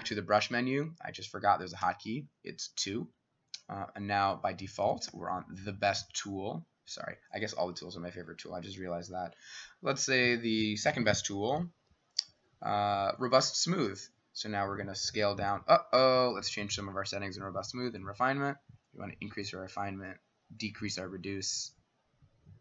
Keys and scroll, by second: 1.0 Escape, 1.8 Escape, 4.4 Escape, 5.1 Escape, 11.1-11.8 [.